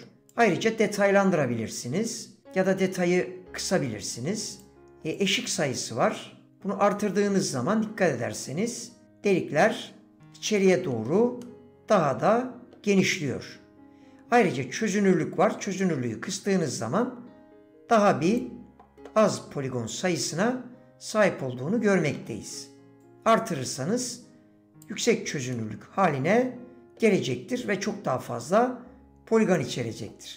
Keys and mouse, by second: 1.0-4.9 drag, 5.1-10.1 drag, 10.6 middle click, 11.4-12.7 middle drag, 15.8-18.9 drag, 19.4-22.1 middle drag, 23.6-25.5 drag, 25.5-27.0 middle drag, 28.7-30.1 drag.